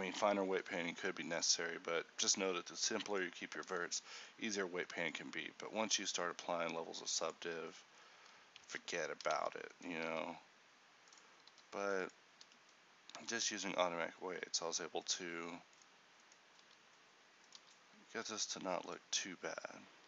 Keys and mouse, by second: 8.7 ctrl+t, 10.3 g, 11.6 r, 12.6 g, 15.8-17.7 right drag, 16.7 r, 17.8-20.0 right drag, 17.8 g.